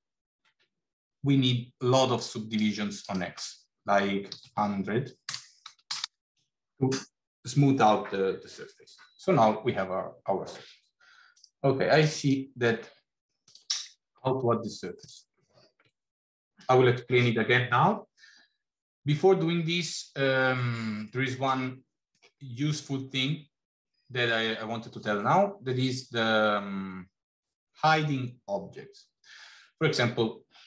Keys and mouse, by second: 2.8-9.2 right drag, 5.8 KP_0, 15.0 click, 21.5 middle click.